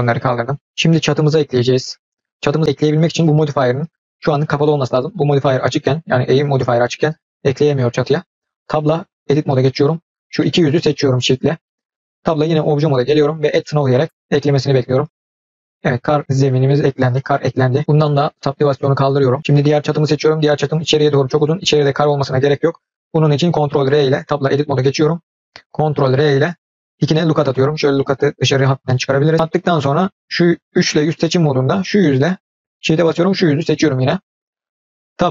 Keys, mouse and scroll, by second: 0.2 click, 0.5 scroll down 2, 0.9 click, 4.0 click, 9.0 Tab, 10.0 click, 10.3 middle drag, 11.2 shift+drag, 11.6 middle drag, 12.2 Tab, 13.4-15.4 drag, 15.5 middle click, 16.2-16.8 middle drag, 17.0 scroll up 1, 17.1-17.7 middle drag, 18.8 click, 19.5 click, 23.4 ctrl+r, 24.4 Tab, 26.0 ctrl+r, 29.7 click, 31.0 3, 31.4 click, 31.9-32.4 middle drag, 32.9 shift+click, 33.6-34.3 middle drag, 35.1 Tab.